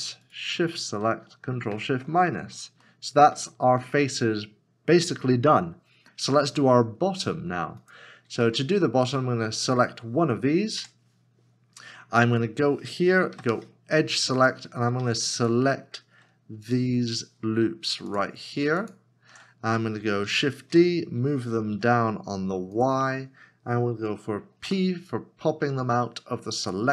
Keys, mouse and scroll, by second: 0.8 shift+click, 1.7 ctrl+shift+-, 2.8 middle click, 3.5 shift+middle click, 8.5 shift+middle click, 12.1 Tab, 12.3-13.3 scroll up 1, 14.8 2, 16.7 alt+shift+click, 18.1 alt+shift+click, 19.7 scroll down 1, 20.6 shift+d, 21.7 y, 24.6 y, 25.5 p.